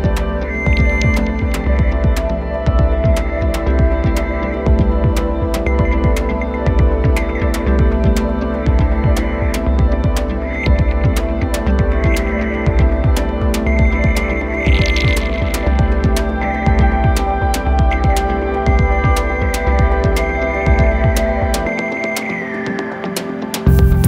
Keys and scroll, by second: 10.9 f, 22.6 super+z.